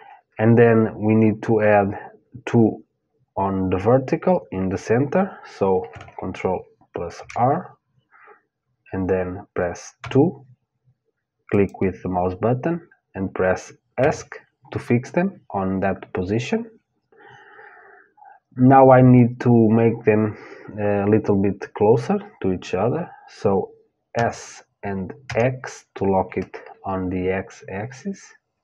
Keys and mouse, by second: 6.8 ctrl+r, 23.7 s.